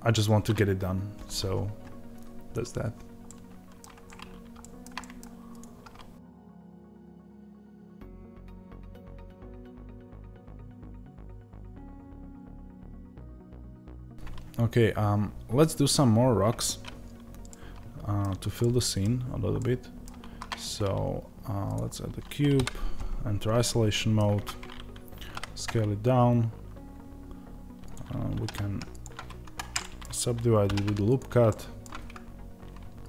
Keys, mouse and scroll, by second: 3.1-5.5 middle drag, 3.9-4.5 scroll up 2, 5.5 click, 5.7 scroll down 1, 6.2-7.7 middle drag, 7.5 scroll up 2, 7.7 click, 7.8 Tab, 8.0 click, 8.0 middle click, 8.3 g, 8.7 click, 8.7 middle click, 9.0 g, 9.5 click, 10.1 click, 10.5 middle click, 11.1 click, 11.1 g, 11.5 click, 11.6-12.9 middle drag, 11.8 scroll down 2, 12.0 g, 12.9 Tab, 13.4 KP_0, 17.3 middle click, 19.1-19.5 scroll up 1, 19.5 middle click, 21.6 shift+a, 22.4 KP_Divide, 23.2 scroll down 1, 23.9 middle click, 24.2 Tab, 28.2 ctrl+r, 29.7-33.0 middle drag, 30.5 ctrl+r, 33.0 click.